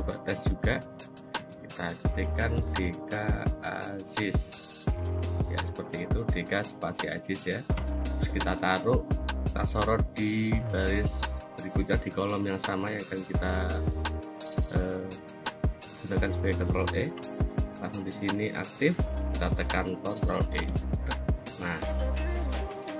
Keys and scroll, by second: 1.0-4.0 typing, 5.0 Return, 6.3 Up, 7.5 Down, 20.4 ctrl+e.